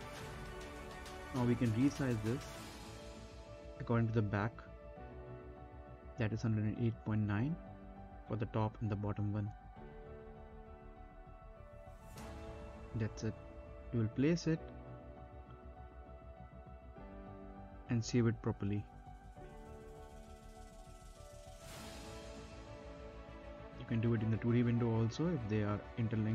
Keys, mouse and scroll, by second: 0.8 click, 1.3 middle click, 1.7 scroll down 1, 1.8 middle click, 2.3 z, 2.7 click, 3.6 right click, 4.2 click, 4.5-6.2 typing, 6.1 click, 7.5 right click, 8.3 click, 8.8-10.8 typing, 12.5-13.6 typing, 13.7 click, 15.1 middle click, 15.2-15.9 scroll down 1, 15.9 click, 16.3 middle click, 16.8 n, 17.2 click, 17.8-18.2 scroll up 1, 18.2 space, 18.7 right click, 18.9 middle click, 19.0 scroll down 1, 19.6 right click, 19.8 middle click, 19.9 scroll down 1, 20.0 right click, 20.6 space, 21.4 n, 22.1 click, 23.3 scroll down 1, 23.6 middle click, 23.8 ctrl+z, 24.0 scroll up 1, 24.3 middle click, 25.0 click.